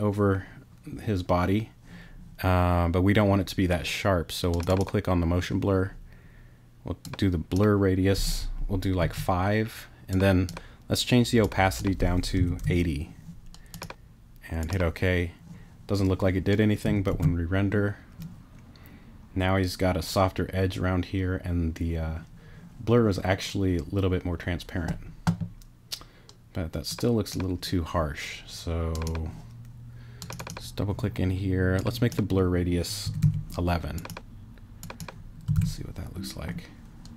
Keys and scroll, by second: 9.0 5, 12.1-13.1 typing, 17.1 super+r, 33.0 l, 35.5 super+r.